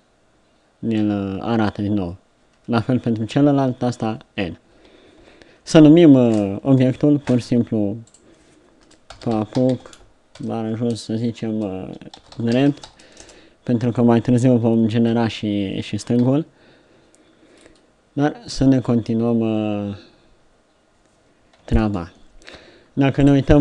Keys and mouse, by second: 1.0 n, 3.5 n, 4.1 n, 4.7 n, 5.2 n, 8.1-13.2 drag, 15.2 n, 16.2 KP_3, 18.8 middle click, 19.6-23.5 middle drag, 23.5 middle click.